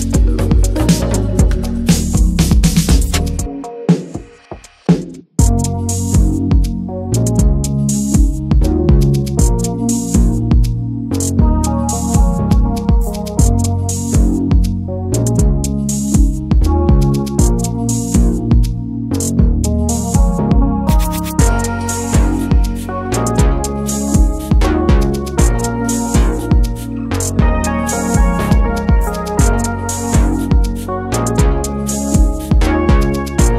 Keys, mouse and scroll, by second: 0.7 alt+z, 1.0 s, 2.5 alt+z, 3.0 alt+z, 3.4 alt+z, 3.7 s, 5.2 alt+middle click, 5.7 alt+middle click, 6.1 click, 7.2 shift+click, 8.8 s, 10.0 scroll down 1, 10.3-10.7 shift+middle drag, 10.7 s, 13.2 shift+click, 14.5 shift+click, 14.9 s, 16.5 alt+z, 16.7 Tab, 17.1 click, 17.4 middle click, 17.7 Tab, 17.8 middle click, 18.2 2, 18.5 click, 19.7 shift+click, 20.6 Tab, 20.9 ctrl+a, 21.3 Tab, 22.3 shift+click, 22.9 shift+drag, 23.3 shift+drag, 24.1 alt+middle click, 24.2 alt+z, 25.2 ctrl+b, 29.0 Tab, 29.2 click, 29.8 Tab, 30.0 a, 30.2 middle click, 30.4 alt+z, 31.0 ctrl+s, 31.4 e, 33.2 middle click.